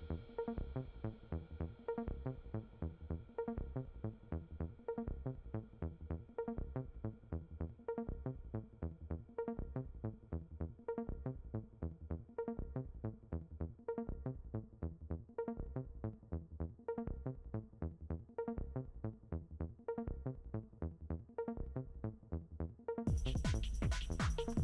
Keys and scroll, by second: 22.0 ctrl+d.